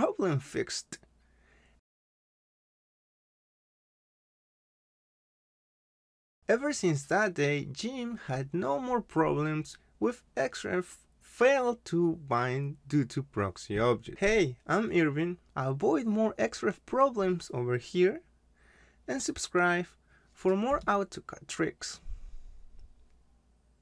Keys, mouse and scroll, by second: 1.6 click, 2.1-4.0 typing, 4.1 Return, 5.2-6.3 scroll up 1, 6.7 click.